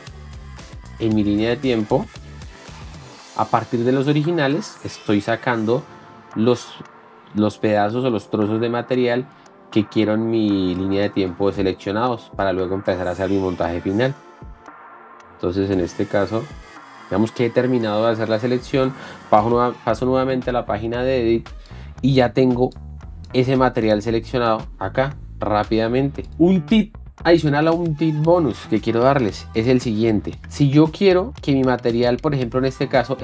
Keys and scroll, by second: 0.0-4.0 typing, 5.6-8.6 typing, 10.0-13.1 typing, 14.5-16.6 typing, 19.7 4.